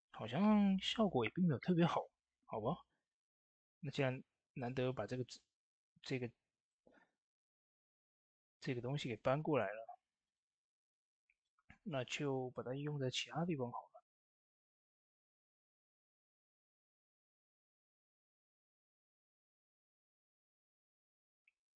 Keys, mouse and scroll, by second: 3.1 Tab, 3.2-4.8 drag, 4.8 shift+space, 6.8-16.7 ctrl+drag, 17.1 shift+space, 17.7-21.1 drag, 21.4 scroll down 1.